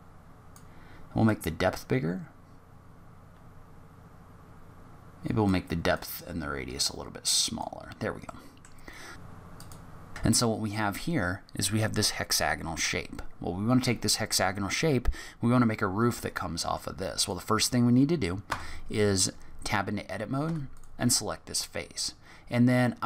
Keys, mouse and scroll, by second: 1.2 click, 5.9 click, 8.3 middle click, 9.2 click, 9.3 click, 9.4 click, 9.5 g, 9.9 scroll up 6, 9.9 g, 10.0 middle click, 10.1 click, 15.9-16.4 scroll up 1, 16.4 middle click, 17.1 click, 18.4 Tab, 19.1 click, 20.4 3, 20.7 click.